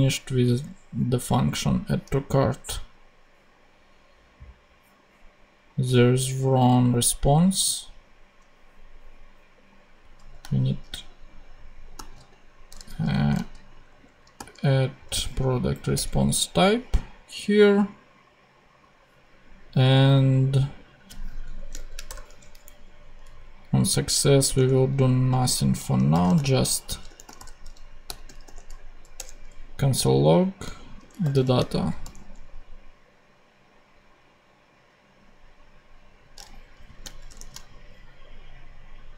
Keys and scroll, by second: 10.5 shift+a, 11.9 shift+d, 12.9 shift+BackSpace, 13.3 d, 15.9 Return, 21.5 super+Left, 22.0 shift+super+BackSpace, 22.9 BackSpace, 23.1 Up, 24.4 Tab, 25.2 Return, 26.0 c, 27.2 l, 28.0 ., 28.4 o, 29.1 Return, 30.9 d, 31.5 super+a, 31.6 super+Right, 31.9 super+;, 32.9 ;, 37.2 shift+super+p.